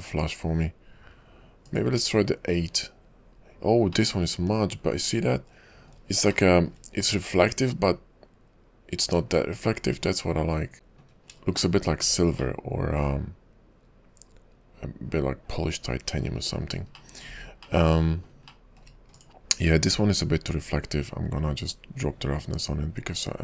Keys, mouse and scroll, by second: 4.1 middle click, 6.5 shift+middle click, 7.3 middle click, 11.5 scroll up 1, 11.8 shift+middle click, 12.6 middle click, 16.6-17.0 scroll down 7, 17.1 shift+middle click, 17.6-17.9 scroll up 3, 17.9 middle click, 18.7 shift+middle click, 19.2 click, 20.0-20.7 scroll down 2, 22.2 click.